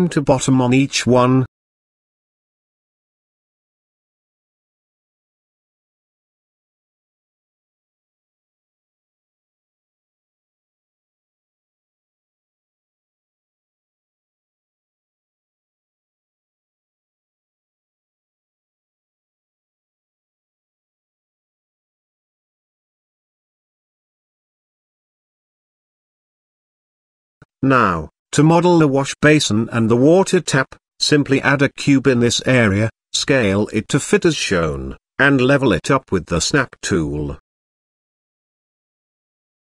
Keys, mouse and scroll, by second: 0.2 click, 1.4 click, 2.1 click, 3.1 click, 4.1 Tab, 5.5 click, 6.4 g, 9.4 Tab, 12.5 click, 12.8 Tab, 13.2 Tab, 13.5 click, 14.0 Tab, 14.5 click, 15.3 click, 16.3 g, 18.5 Tab, 19.1 click, 19.8 ctrl+s, 21.9-22.6 middle drag, 23.5 click, 24.2 click, 25.4 middle click, 25.7 shift+middle click, 27.1 click, 27.4 click, 29.9 click, 30.4 click, 30.8 shift+a, 32.8 s, 33.9 z, 34.4 middle drag, 34.7 shift+middle drag, 35.3-35.7 middle drag, 35.9-36.2 shift+middle drag, 36.7-37.0 middle drag, 37.1 s, 38.8 middle click, 39.2 g.